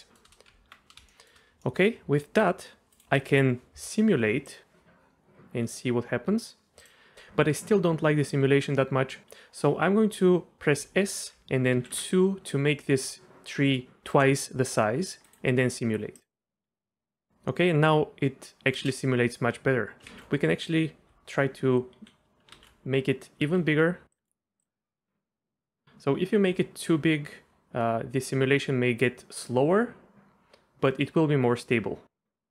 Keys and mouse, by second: 0.0 shift+middle click, 0.1 shift+click, 0.5 Tab, 1.1 shift+drag, 1.6 middle click, 2.9-6.9 drag, 7.1 ctrl+z, 10.8 s, 11.7 KP_2, 11.9 KP_Enter, 13.2 shift+middle click, 15.2-16.9 drag, 18.7 space, 20.1 ctrl+z, 22.6 ctrl+z, 23.5 s, 24.1-25.5 drag, 25.5 right drag.